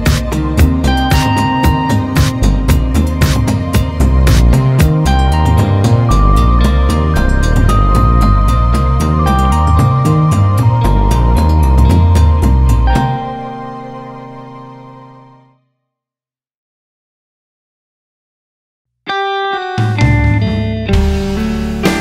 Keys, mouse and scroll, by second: 0.6 Tab, 0.8 `, 1.9-7.2 drag, 3.4 `, 3.6-4.0 scroll up 2, 4.0 ctrl+a, 5.4 KP_0, 7.2 Tab, 7.8 click, 8.8 shift+g, 9.1 scroll down 1, 9.2-10.8 drag, 9.3 `, 10.8 ctrl+e, 11.2 Tab, 14.2 click, 14.2 scroll down 1, 14.4 `, 14.6 Tab, 16.8 scroll up 2, 17.0-17.5 scroll down 2, 17.5 click, 17.7 Tab, 17.8 `, 18.2-18.8 scroll up 4, 18.4 Tab, 18.8 `, 19.8 click, 20.7 KP_Decimal, 21.5 shift+g, 21.6-22.0 scroll down 2.